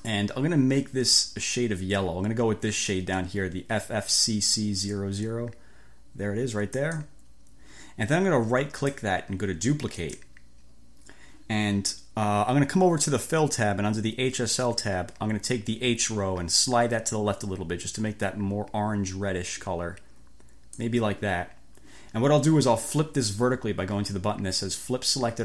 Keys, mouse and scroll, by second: 6.9 click, 8.9 right click, 10.0 click, 16.7 click.